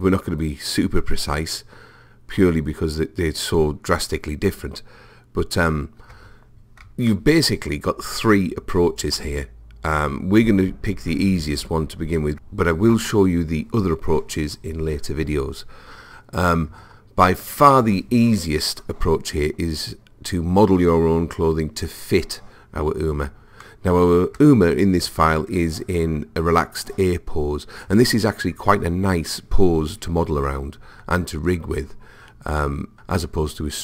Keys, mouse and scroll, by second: 7.1-9.1 middle drag, 17.4 click, 23.7-27.3 middle drag.